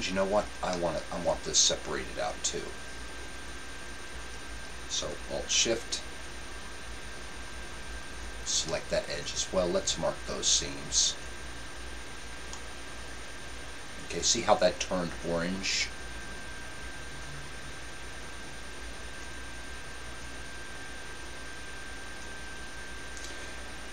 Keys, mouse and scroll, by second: 3.2-5.1 right drag, 6.0-9.6 right drag, 11.2-12.7 drag, 12.6-14.4 middle drag, 12.8 click, 18.6 middle click, 19.0 middle click, 20.4 middle click.